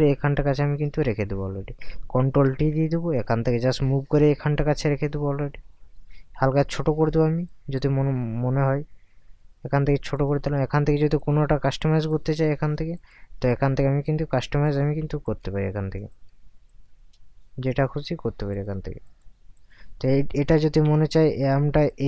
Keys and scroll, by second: 2.5 ctrl+t, 20.5 ctrl+t.